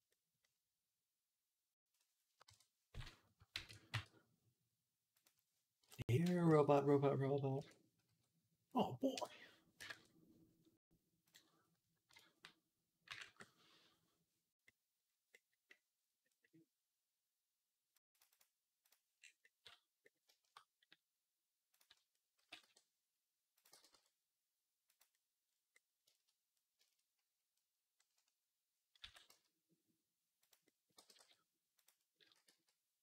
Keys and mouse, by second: 3.4 ctrl+a, 6.3 Tab, 19.0 middle click, 22.2-25.0 middle drag, 22.2 s, 25.0 click, 25.0 g, 25.2 click, 25.9-30.8 shift+middle drag, 28.9 s, 30.8 g, 32.1 s.